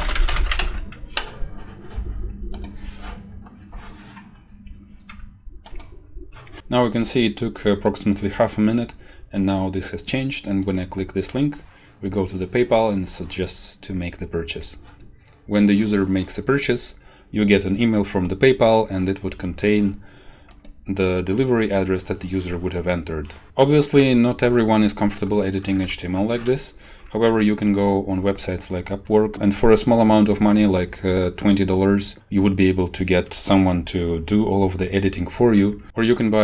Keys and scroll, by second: 0.0-1.1 typing.